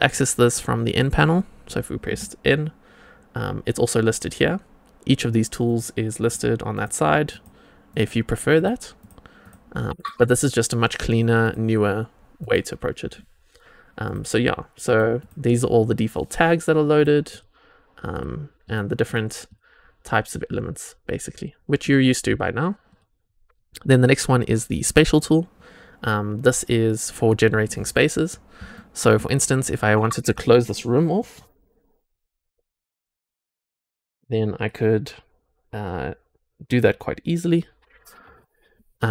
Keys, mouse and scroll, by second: 0.8 click, 2.0 n, 5.6 click, 6.1 click, 6.7 click, 7.2 click, 7.8 click, 8.5 drag, 8.9 click, 9.4 click, 9.9 click, 11.4 click, 12.3 click, 14.0 click, 15.1-16.9 drag, 17.2-18.1 drag, 18.5 click, 19.4-22.8 drag, 24.8 click, 28.2 scroll up 1, 28.7 shift+middle click.